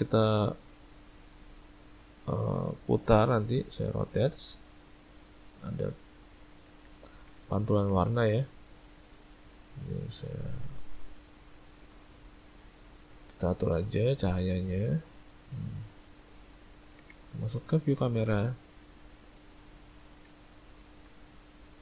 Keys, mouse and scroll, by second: 6.7 ctrl+z, 7.4 ctrl+middle click, 7.6 ctrl+middle click, 8.5 click, 8.9 middle click, 10.1 `, 11.7 click, 14.0 r, 15.7 middle click, 16.1 middle click, 16.6 ctrl+middle click, 16.8 ctrl+middle click, 17.1 `, 18.7 `.